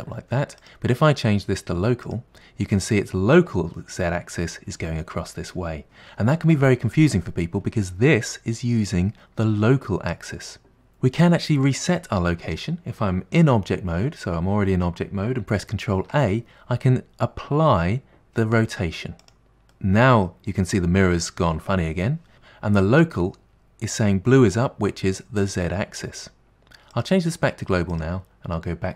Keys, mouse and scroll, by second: 0.6-3.0 drag, 3.0-5.8 middle drag, 15.9 ctrl+a, 19.8-23.9 middle drag, 27.0-28.9 drag.